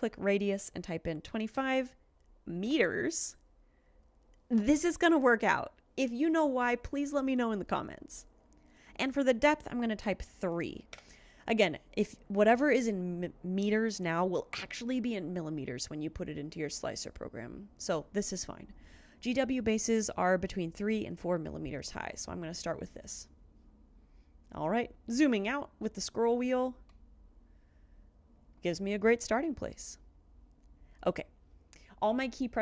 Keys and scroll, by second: 1.3 typing, 2.7 Return, 10.1 3, 11.1 Return.